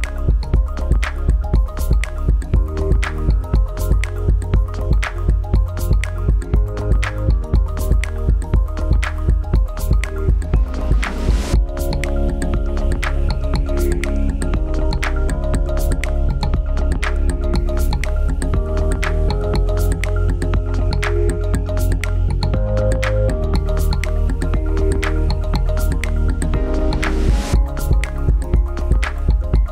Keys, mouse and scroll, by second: 1.3 click, 28.2 click.